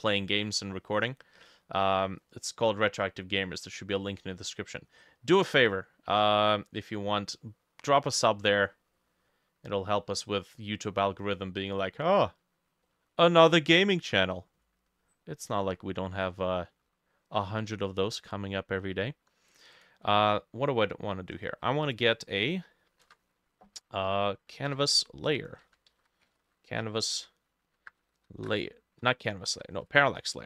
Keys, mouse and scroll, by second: 0.1 middle click, 0.8 middle click, 0.9-1.4 scroll down 1, 1.4 middle click, 2.3 middle click, 3.6 middle click, 4.4 middle click, 4.9 middle click, 5.5 middle click, 6.3 middle click, 7.0 middle click, 8.0 middle click, 8.5 middle click, 10.0 middle click, 12.9 middle click, 13.3 scroll down 1, 15.5-15.9 scroll up 2, 15.9 middle click, 19.8 double click, 20.6 middle click, 21.4-22.3 scroll up 6, 24.7 Escape, 25.7-27.0 typing, 28.5 Return, 28.5 Down, 29.1 Escape, 30.0 ctrl+z.